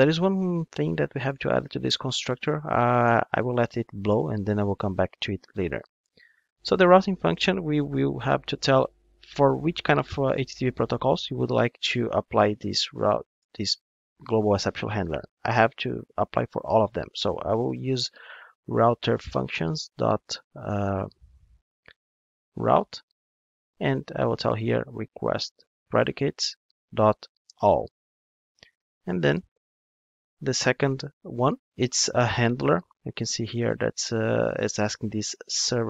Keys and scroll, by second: 19.5 Return, 31.2 super+p.